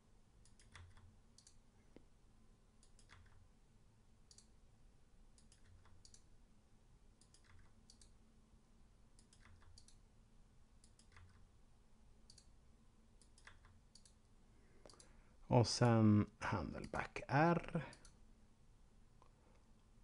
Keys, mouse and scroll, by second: 0.4 right click, 0.7 g, 1.2 click, 2.7 right click, 3.0 g, 4.2 click, 5.2 right click, 5.5 g, 6.0 click, 7.2 right click, 7.4 g, 7.9 click, 9.0 right click, 9.4 g, 9.8 click, 10.7 right click, 11.0 g, 12.2 click, 13.2 right click, 13.4 g, 13.9 click, 14.9 click.